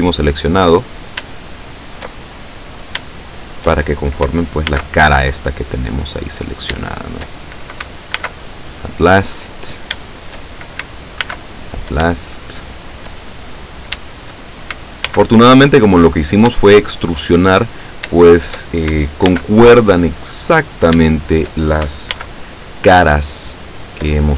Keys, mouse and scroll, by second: 0.8-1.4 scroll up 3, 1.4 shift+middle click, 2.8 shift+right click, 3.3 shift+right click, 4.7 alt+m, 5.5 click, 6.5 right click, 7.0 shift+right click, 8.2 alt+m, 8.7 alt+click, 9.7 shift+right click, 10.1 shift+right click, 11.3 alt+m, 11.7 alt+click, 12.1-13.2 alt+shift+middle drag, 13.7 right click, 14.1 shift+right click, 15.1 alt+m, 15.7 click, 16.6 shift+middle click, 17.9 shift+right click, 18.3 shift+right click, 19.4 alt+m, 19.9 alt+click, 20.7 right click, 21.2 shift+right click, 22.2 alt+m, 22.7 alt+click, 23.5 scroll down 1.